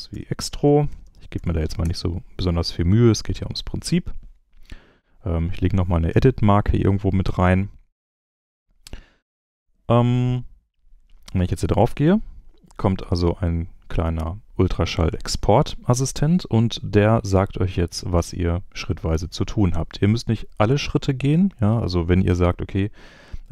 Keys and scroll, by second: 0.0-1.8 typing, 6.1 e.